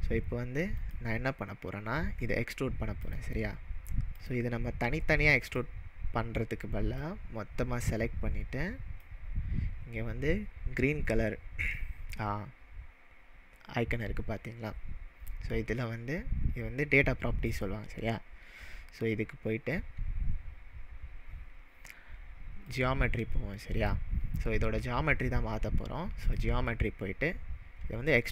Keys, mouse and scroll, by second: 0.8 click, 3.1 click, 3.6-4.1 scroll up 1, 4.1 scroll up 1, 4.2 click, 5.4 click, 7.0-9.1 drag, 17.5 click, 20.8-22.1 scroll down 3, 22.1-22.6 scroll down 1, 22.7-26.1 drag.